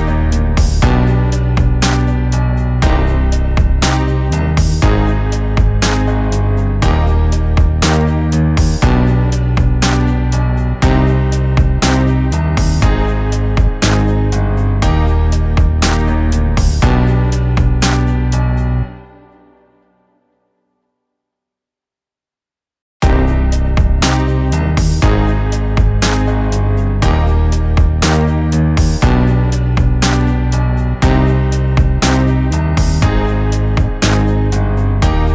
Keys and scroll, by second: 1.2 ], 1.5 ctrl+z, 2.4 [, 2.4 [, 2.9 [, 3.3 ctrl+z, 4.1 ctrl+z, 4.3 [, 4.5 ctrl+z, 5.1 [, 5.3 ctrl+z, 6.3 ctrl+z, 6.9 ], 6.9 ], 7.3 ctrl+z, 10.6 [, 11.8 [, 11.8 [, 12.4 [, 12.7 ctrl+z, 13.0 ctrl+d, 15.8 [, 15.8 [, 23.1 ctrl+t, 25.2 ctrl+d.